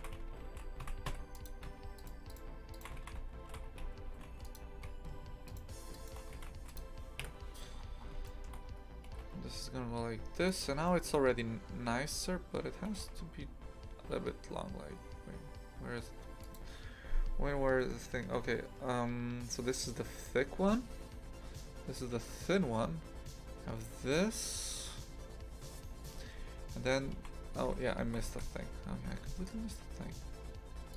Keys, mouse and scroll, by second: 0.0 shift+f, 1.9 alt+shift+right click, 2.3 alt+shift+right click, 2.7 alt+shift+right click, 3.0 shift+f, 5.4 alt+shift+right click, 5.9 alt+shift+right click, 6.3 shift+f, 7.2 KP_3, 7.7 scroll down 2, 8.2 shift+middle click, 8.6-9.0 scroll up 3, 9.0 g, 10.8 shift+middle click, 11.2-12.1 scroll down 2, 12.1-12.9 scroll up 1, 12.9 g, 27.1 shift+f, 28.0 shift+f.